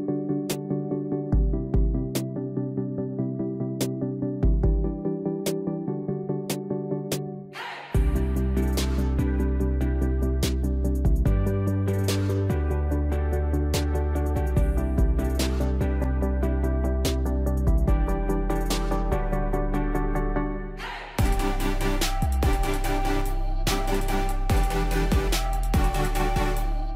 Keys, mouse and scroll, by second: 2.6 ctrl+z, 4.2-20.3 drag, 20.6 right click, 22.6 click.